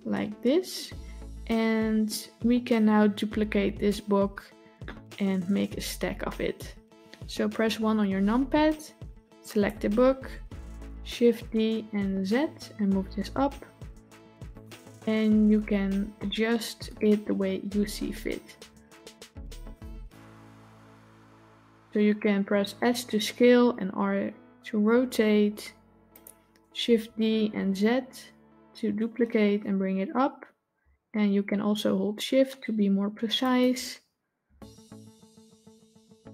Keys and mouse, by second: 7.8 KP_1, 9.3 click, 11.3 shift+d, 16.0-16.7 shift+middle drag, 18.4 s, 19.9 r, 27.0 shift+d, 34.3 s.